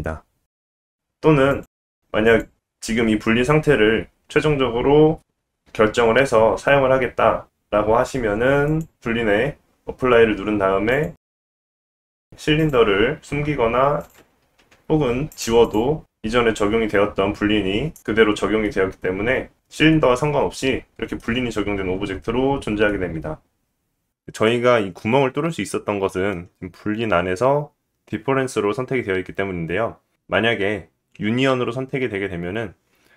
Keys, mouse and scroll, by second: 0.6 shift+middle click, 8.3 click, 9.6-11.1 drag, 11.2 click, 12.6 click, 14.0 click, 14.5 x, 15.3-15.7 drag, 17.0 g, 20.4-31.1 middle drag, 31.1 click, 31.3-33.1 middle drag.